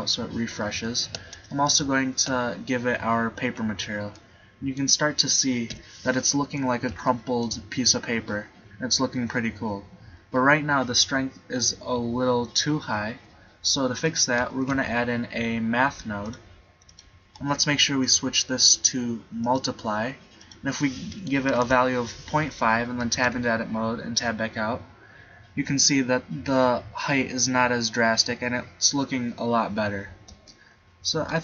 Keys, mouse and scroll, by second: 1.7 click, 3.4 middle click, 5.8 KP_7, 6.5 middle click, 7.0 middle click, 13.3-14.6 middle drag, 14.6 shift+a, 17.1-18.8 drag, 23.2 Tab, 23.3 Tab, 30.5 click.